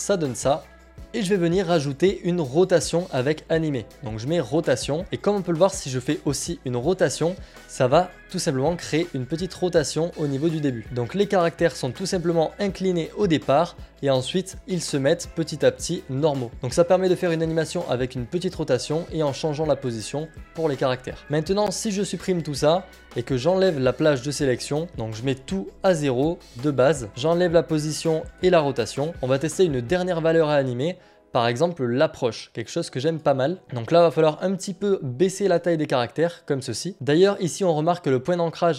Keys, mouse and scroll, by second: 1.1 click, 3.0 click, 6.4 click, 7.1 click, 10.8 click, 15.1 click, 16.5 click, 18.2 click, 19.3 click, 21.6-22.8 scroll, 23.8 click, 25.5 click, 25.5 0, 26.6 click, 26.6 0, 27.8 Delete, 27.8-28.3 scroll, 28.3 click, 29.1 click, 30.3 click, 32.4 click, 33.5-35.5 scroll, 35.5 click.